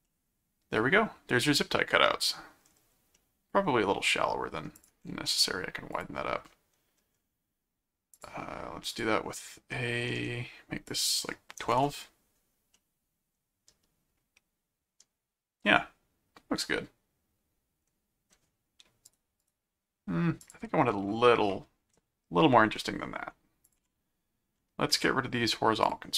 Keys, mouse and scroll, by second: 0.0-2.2 middle drag, 3.1-4.6 middle drag, 4.8 click, 5.9 click, 8.1 click, 8.9 click, 9.7 middle click, 10.9 click, 12.7-18.3 middle drag, 19.1 right click, 20.4 ctrl+click, 20.9 ctrl+1, 23.6 click, 25.8 click.